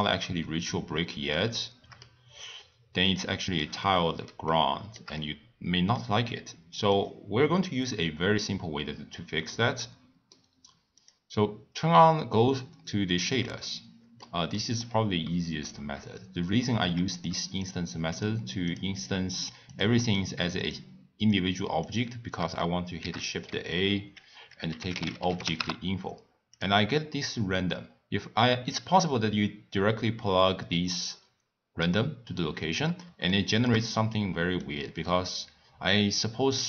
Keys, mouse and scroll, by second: 0.0-2.3 middle drag, 2.3-3.1 scroll up 2, 3.1-6.9 shift+middle drag, 6.9 click, 9.5-11.1 middle drag, 11.1 click, 12.1 scroll down 2, 12.2 scroll up 1, 12.2-12.5 scroll down 1, 12.5 scroll up 2, 12.6 scroll down 1, 12.8 scroll up 2, 13.0-13.5 scroll down 8, 13.5-14.1 scroll up 1, 14.8 click, 16.3 scroll down 1, 16.4 scroll up 1, 17.3 Left, 17.7 Left, 18.5 Left, 18.8 Left, 18.9 scroll down 1, 19.0 click, 19.8 click, 20.1 click, 20.7 click, 32.6 scroll up 1, 32.7-33.0 scroll down 2, 33.3-34.0 shift+middle drag, 34.0-34.4 scroll down 2, 34.6-36.6 middle drag.